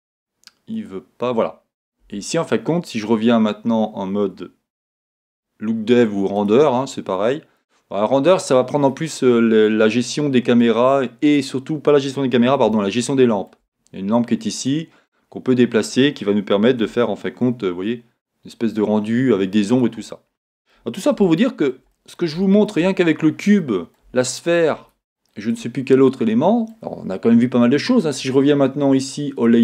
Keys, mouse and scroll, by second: 0.8 click, 2.1 Tab, 6.8-10.6 middle drag, 6.8 z, 10.0 scroll down 1, 10.8 middle click, 12.8 shift+middle click, 15.0 click, 15.1 middle click, 17.0 g, 19.9 click, 20.1-25.9 middle drag, 23.0-23.6 scroll up 2, 28.7 middle click, 29.5 click.